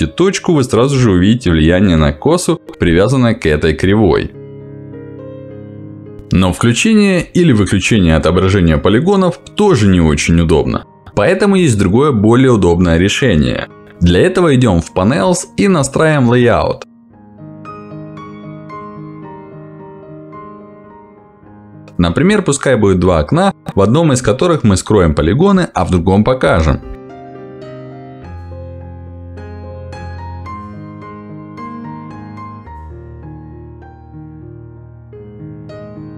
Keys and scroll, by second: 1.9 b, 16.7 Escape.